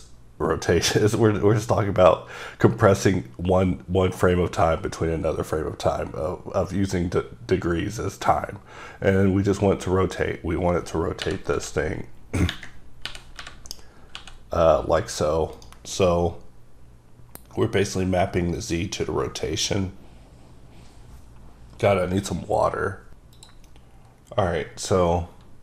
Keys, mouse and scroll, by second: 11.6 r, 12.5 ⦸, 13.0 r, 14.1 typing, 15.5 right click, 18.5 click, 19.4-21.0 scroll down 1.